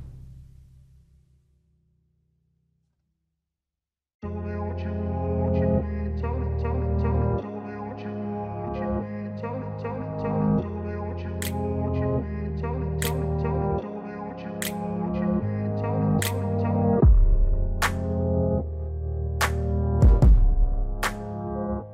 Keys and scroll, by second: 1.3 alt+w, 3.6 alt+x.